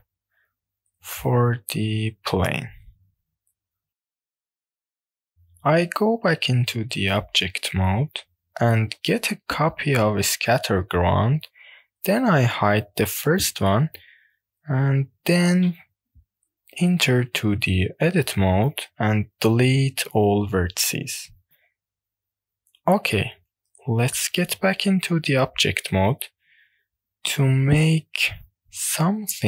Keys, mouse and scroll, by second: 0.0 click, 0.6 scroll down 1, 1.0 middle click, 1.6 click, 2.1 shift+middle click, 2.9 shift+middle click, 3.6 click, 5.1 Tab, 5.6 click, 6.0-6.7 shift+middle drag, 6.8-7.7 drag, 7.9 shift+middle click, 8.5 click, 10.2 shift+d, 11.0 click, 11.0 right click, 13.2 drag, 13.9 click, 15.7-16.5 drag, 16.5 Tab, 18.7 a, 19.3 x, 22.5 Tab, 23.5-24.1 scroll down 1, 24.3-25.3 shift+middle drag, 26.1 scroll down 1, 26.2 middle click.